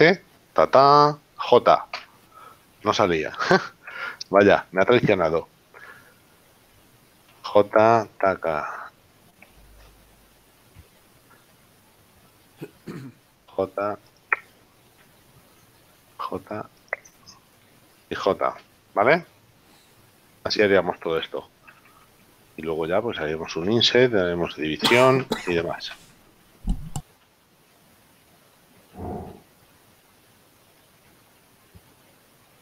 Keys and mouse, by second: 2.4 j, 4.0 ctrl+z, 5.4 right click, 7.4 j, 10.0 Escape, 11.0 ctrl+z, 11.7 shift+right click, 13.7 j, 15.3 shift+right click, 16.4 j, 17.7 shift+right click, 18.7 j, 21.7 ctrl+z.